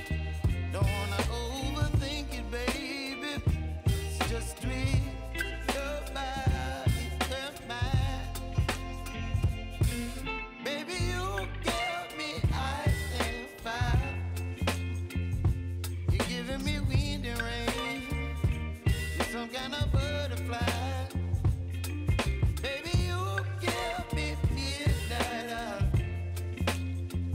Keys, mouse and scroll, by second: 0.6 click, 1.6 shift+click, 2.5 shift+click, 5.9 scroll up 1, 7.0 ctrl+shift+c, 7.5-9.7 typing, 10.8 click, 12.9 ctrl+v, 13.5-16.1 typing, 15.5 scroll down 1, 18.6 ctrl+z, 20.2 click, 21.2 y, 22.3 u, 23.0-27.3 drag.